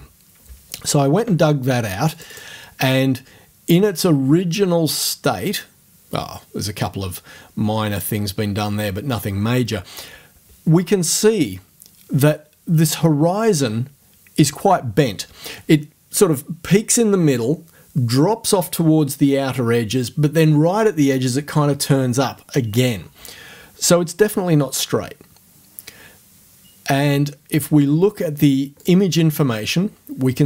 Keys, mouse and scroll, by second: 2.1 click, 28.8 click.